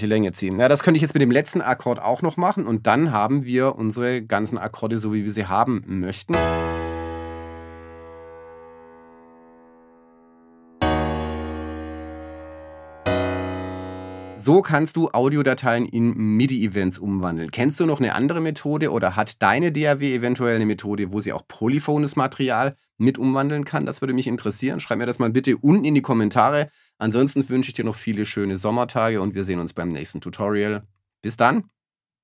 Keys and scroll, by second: 6.2 shift+space.